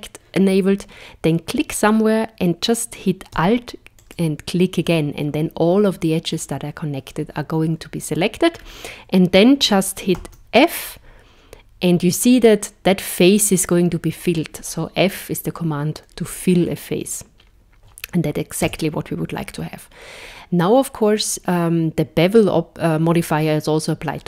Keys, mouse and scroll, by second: 4.0 alt+click, 8.5-11.0 scroll down 3, 11.0 f, 18.6 Tab.